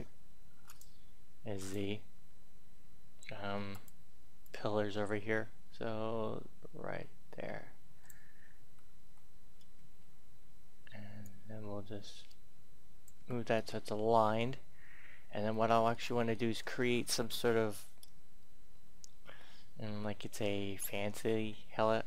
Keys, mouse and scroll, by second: 0.6 click, 3.2 e, 3.6-8.6 drag, 8.6 a, 9.0 a, 9.8 Tab, 11.2-13.2 drag, 13.2 Tab, 13.5-20.8 middle drag, 20.9 Tab, 21.3 Tab.